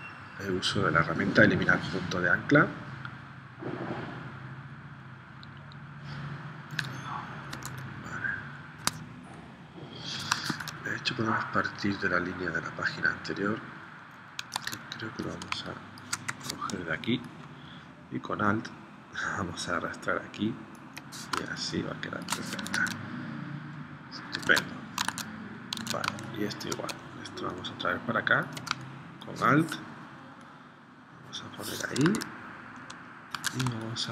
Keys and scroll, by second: 7.5 super+Tab, 10.5 super+Tab, 14.6 super+Tab, 15.5 space, 16.3 v, 21.6 space, 22.7 super+Tab, 24.5 super+Tab, 25.2 super+Tab, 26.1 space, 28.8 space, 32.1 super+Tab, 33.3 super+Tab, 33.8 space.